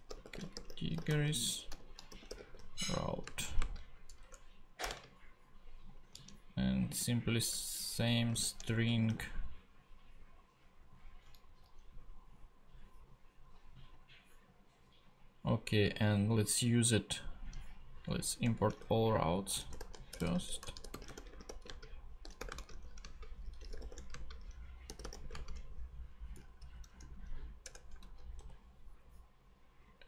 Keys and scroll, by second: 0.0-4.9 typing, 7.7 shift+', 8.3 shift+super+', 8.7 shift+super+Right, 9.1 shift+super+;, 9.9 shift+;, 11.4 shift+Left, 18.4 shift+Return, 19.1-25.7 typing, 27.6 Return, 28.0 super+Right, 28.4 super+;.